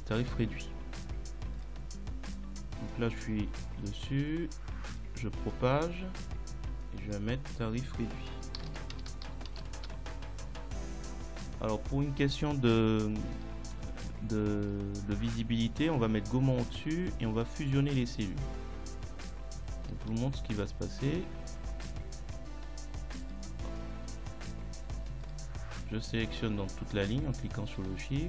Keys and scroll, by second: 8.7 r, 9.0 d, 9.3 i, 9.5 t, 9.8 Return.